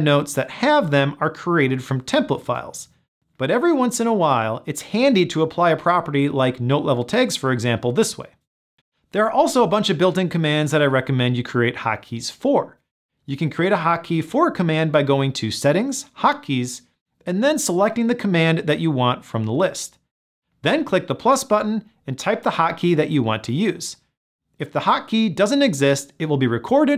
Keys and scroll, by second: 4.3 super+,, 23.6 ctrl+alt+shift+super+l.